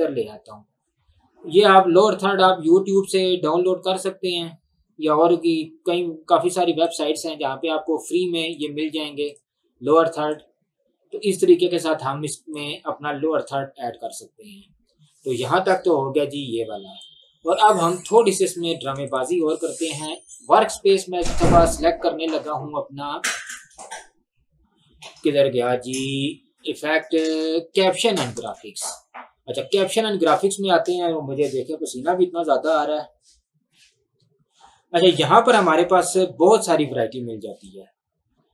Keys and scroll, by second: 18.9 Delete.